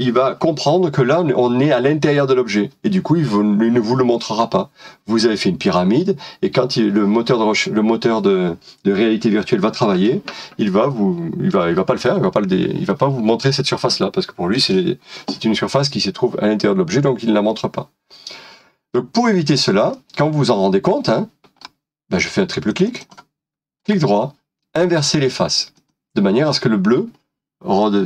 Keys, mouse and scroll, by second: 19.9 middle click, 22.8 double click, 23.8 right click, 27.8 middle click.